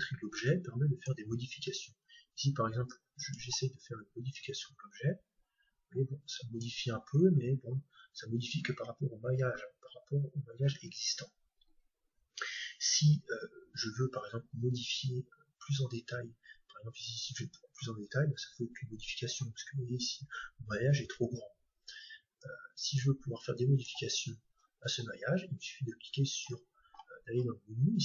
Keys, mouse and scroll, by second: 0.4-2.2 drag, 2.1-5.6 middle drag, 3.1-6.2 drag, 7.0 Tab, 8.7 Tab, 9.2 Tab, 10.7 Tab, 15.5-17.8 middle drag, 17.1-18.9 drag, 19.5 Tab, 21.0 Tab, 22.4-24.2 drag, 26.4-27.2 scroll up 1, 27.2-27.8 scroll up 1, 27.8-28.0 middle drag.